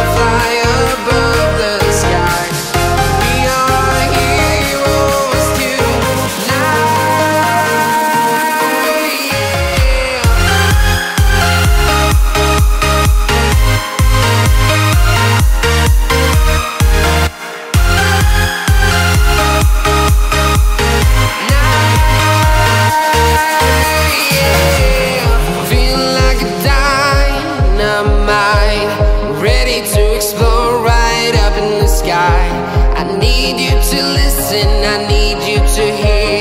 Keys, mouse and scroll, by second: 0.4 scroll, 0.9-3.4 right drag, 3.4-4.2 scroll up 1, 5.1 click, 6.6 click, 8.1 scroll down 1, 9.5 Return, 10.3 right click, 11.7 right click, 12.0-12.3 scroll up 1, 12.9 click, 13.3 right click, 14.2 scroll down 1, 15.2 click, 15.4-15.7 scroll down 1, 15.7-17.7 right drag, 17.7 ctrl+z, 17.9 scroll up 1, 18.1 right click, 18.5 click, 18.9 right click, 19.8 click, 22.1 right click, 23.1-23.5 scroll down 1, 23.9 right click, 24.9 click, 25.1 scroll down 1, 25.3-26.9 right drag, 26.9-27.3 scroll up 1, 27.3 right click, 28.0 scroll up 1, 30.1 ctrl+alt+s, 30.4 scroll up 1, 30.9 ctrl+shift+click, 31.7 scroll down 1, 34.1 scroll up 1, 34.8 ctrl+shift+click, 35.1 scroll down 1, 35.9 click.